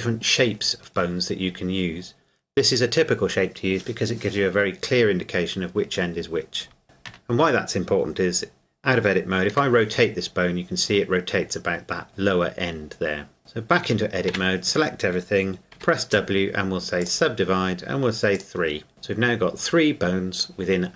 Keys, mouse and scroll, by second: 7.1 Tab, 9.5 r, 13.4 Tab, 13.8 a, 14.3 a, 15.7 w, 17.0 click.